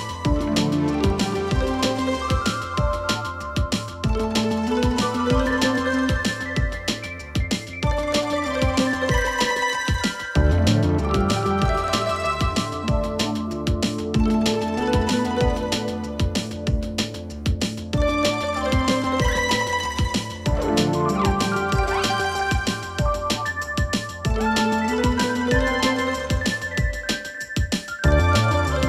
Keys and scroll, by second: 13.8 Delete.